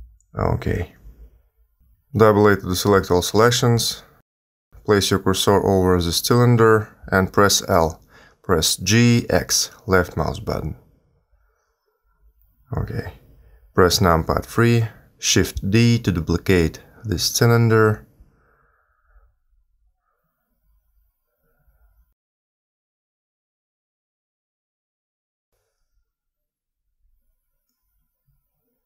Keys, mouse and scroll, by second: 3.9 a, 4.0 a, 4.8 l, 5.9 middle click, 7.6 g, 14.4 KP_3, 15.6 shift+d, 17.1 s, 20.2 r, 23.1 middle click, 24.4 r, 26.9 g, 28.2 g.